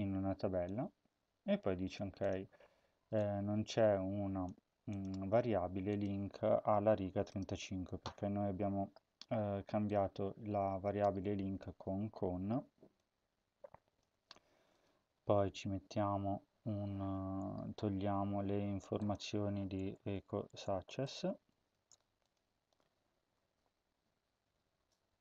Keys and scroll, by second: 11.6 ctrl+c, 20.2-21.7 typing, 23.3 ctrl+s.